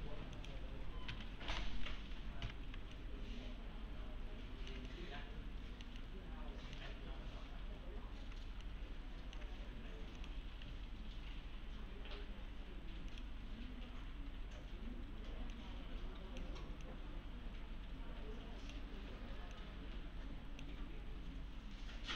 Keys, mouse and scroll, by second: 0.8-2.4 typing, 3.0-4.8 alt+middle click, 6.0 alt+middle click, 8.6-9.6 alt+middle click, 10.2 click, 13.1 click, 15.5-16.5 click.